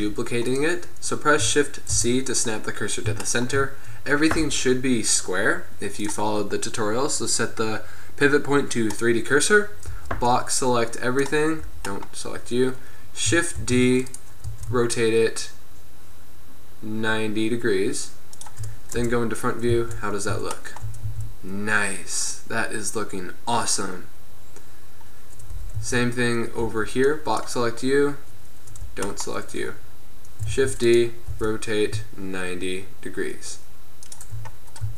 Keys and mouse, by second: 0.0 b, 0.6-2.5 drag, 2.0 shift+c, 10.0 b, 11.7 b, 13.8 shift+d, 14.6 r, 19.0 KP_0, 19.8 z, 20.8 middle click, 21.2 a, 25.6 KP_7, 25.8 z, 26.7 b, 28.9 b, 30.7 shift+d, 31.4 r, 34.7-34.9 drag.